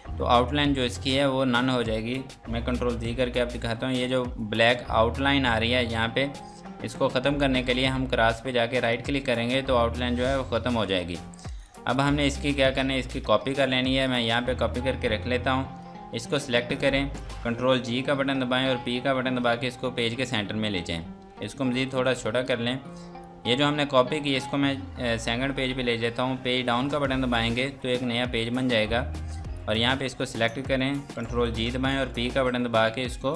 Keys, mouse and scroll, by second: 3.7 scroll up 1, 4.4-5.1 scroll down 1, 5.1 scroll up 1, 6.4-7.1 scroll down 1, 8.7 right click, 9.7-10.1 scroll down 1, 11.5 click, 14.1 right click, 15.8 click, 17.9 ctrl+g, 21.4 click, 22.3 click, 27.1 Page_Down, 28.3 click, 31.5 typing.